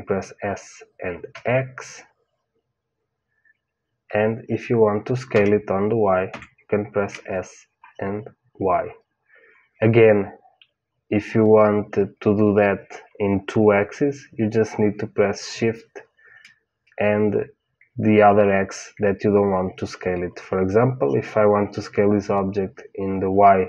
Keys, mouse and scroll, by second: 5.2 s.